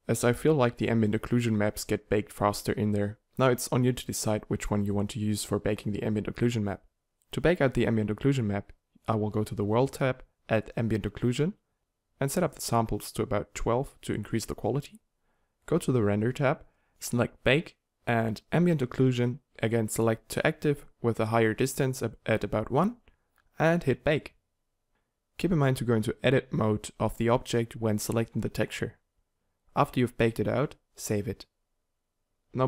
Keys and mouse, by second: 1.6 middle click, 4.4 middle click, 10.9-12.6 middle drag, 22.2 Tab, 22.6 middle click.